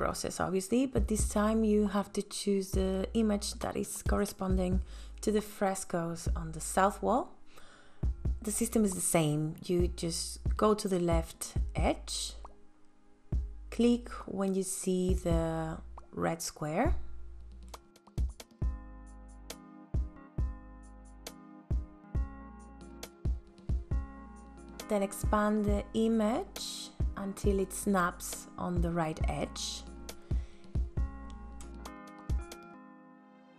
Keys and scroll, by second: 32.0 space.